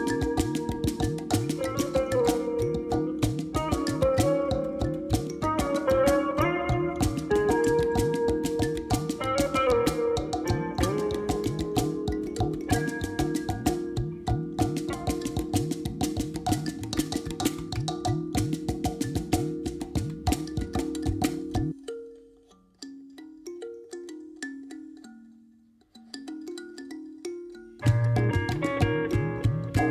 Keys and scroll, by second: 11.0 0, 11.1 ., 11.4 5, 11.6 Return, 13.1 Tab.